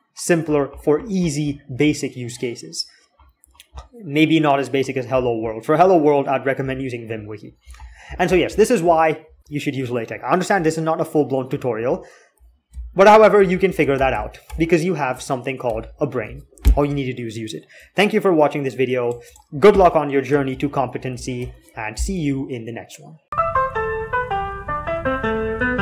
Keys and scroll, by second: 12.6 alt+x, 13.3 alt+x, 13.7 alt+x, 13.9 alt+x, 14.2 alt+x, 15.4 alt+2, 20.3 alt+F9, 21.2 alt+8.